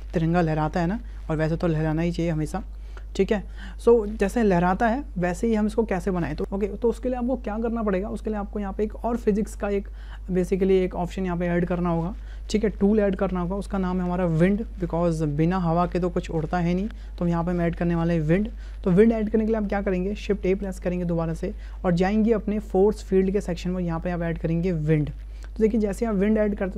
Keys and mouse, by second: 20.5 shift+a.